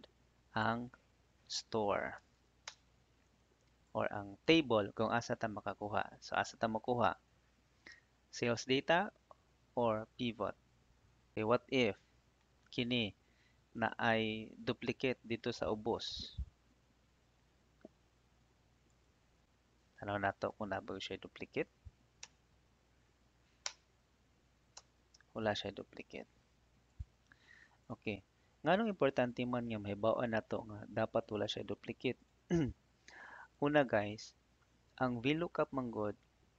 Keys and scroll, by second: 1.6 s, 2.6 Return, 11.7 ctrl+c, 20.7 ctrl+f, 22.1 Return, 23.5 Return, 26.0 Escape.